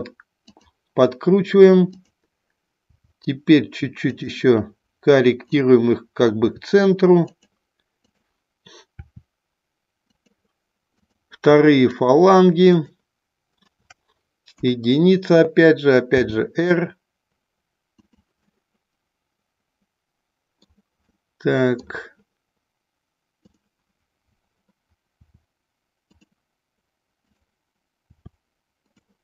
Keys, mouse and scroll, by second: 0.5 click, 1.9 click, 2.7 r, 4.1 click, 5.5 click, 6.3 r, 7.3 click, 8.0 click, 8.9 r, 10.0 click, 10.9 click, 11.8 shift+click, 12.6 shift+click, 14.6 KP_1, 16.2 r, 17.9 click, 18.4-20.8 middle drag, 21.1 middle click, 23.4 click, 25.2 r, 28.8 click.